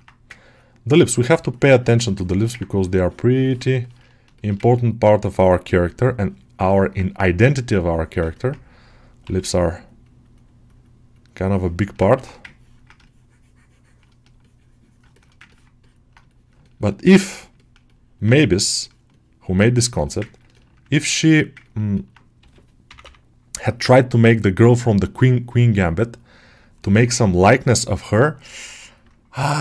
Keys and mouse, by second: 1.4 shift+click, 1.8 shift+click, 2.1 alt+shift+middle click, 3.3 ctrl+alt+middle click, 4.2 alt+shift+middle click, 4.5 ctrl+alt+middle click, 5.7 click, 6.6 ctrl+alt+middle click, 7.0 click, 8.2-9.5 ctrl+alt+middle drag, 9.5-11.2 drag, 11.4 alt+middle click, 12.4 ctrl+click, 12.9 shift+click, 14.3 shift+click, 15.0 alt+shift+middle click, 15.4 ctrl+alt+middle click, 15.7 alt+click, 16.1 shift+click, 16.5 alt+shift+middle click, 16.8 alt+middle click, 17.5 ctrl+alt+middle click, 17.7 middle click, 18.2-19.7 shift+middle drag, 19.8 shift+middle click, 20.1 ctrl+alt+middle click, 20.8 ctrl+middle click, 21.1 alt+middle click, 21.5 ctrl+alt+middle click, 21.8 alt+middle click, 23.7 click, 24.5 alt+middle click, 25.3-26.6 drag, 26.7 alt+middle click, 27.1 click, 28.0 alt+middle click, 29.2 click.